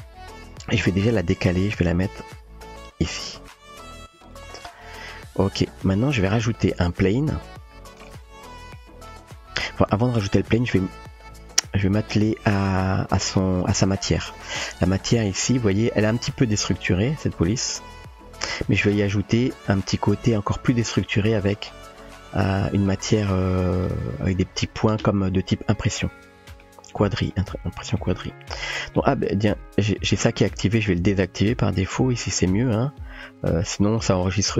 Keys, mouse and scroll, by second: 1.0 g, 8.4-8.7 shift+middle drag, 10.5 click, 15.4 typing, 17.4-18.0 middle drag, 20.4 click, 22.6-23.0 middle drag, 23.6-24.2 shift+middle drag, 26.0-26.6 middle drag, 27.0-27.4 shift+middle drag, 28.0-29.1 middle drag, 32.0 click.